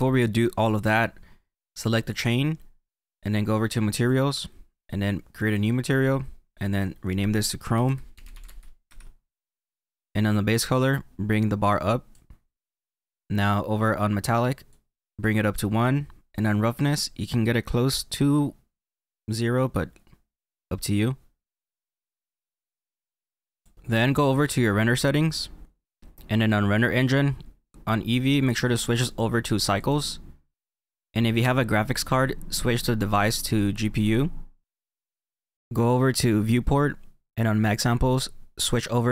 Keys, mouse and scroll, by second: 2.1 click, 4.0 click, 5.5 click, 6.7 click, 10.5 click, 12.9-14.7 scroll down 4, 14.7 click, 16.0-17.2 scroll down 2, 17.2 click, 25.3 click, 28.4 click, 33.2 click, 37.7 click.